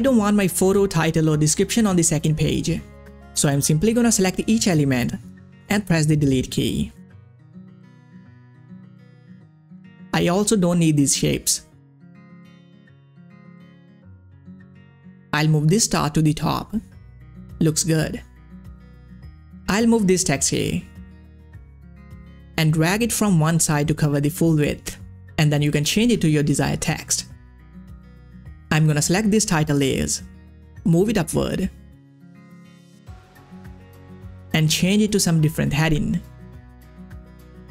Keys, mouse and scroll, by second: 3.1 ctrl+scroll up 1, 3.7 scroll up 1, 4.3 click, 7.0 scroll up 1, 7.6 click, 9.3-18.9 drag, 19.6-22.2 drag, 22.2-26.8 drag, 28.0 click, 28.6 shift+click, 31.2-32.6 drag, 34.6-36.8 typing, 36.8-37.7 drag.